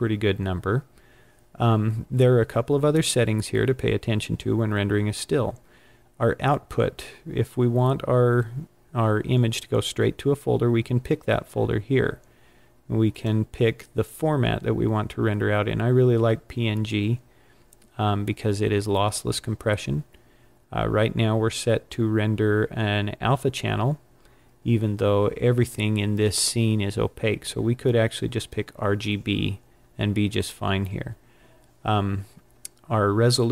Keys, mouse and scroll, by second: 13.0 click, 28.2 click.